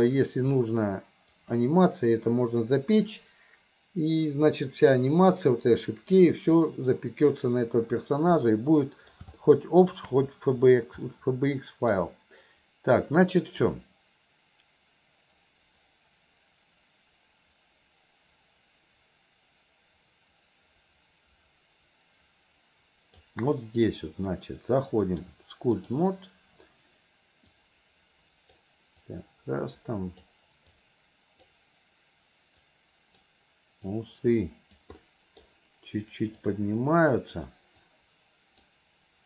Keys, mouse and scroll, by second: 0.5 click, 8.4-9.2 middle drag, 9.4-10.0 middle drag, 11.2 middle click, 13.7-23.4 drag, 25.1 click, 27.5-28.6 drag, 29.1-30.3 drag, 30.8 click, 32.7 click, 33.9 click, 35.0 middle click, 36.5 click, 37.9 click.